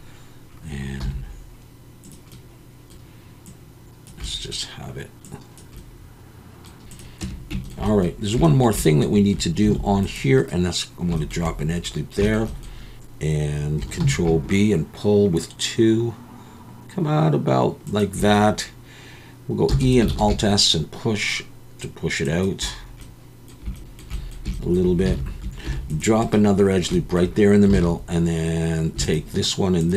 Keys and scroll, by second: 1.0 g, 6.6 Tab, 6.6 x, 7.2 Tab, 9.6 ctrl+r, 14.0 ctrl+b, 19.7 e, 20.2 alt+s, 25.1 alt+a, 25.6 ctrl+r, 27.7 alt+a.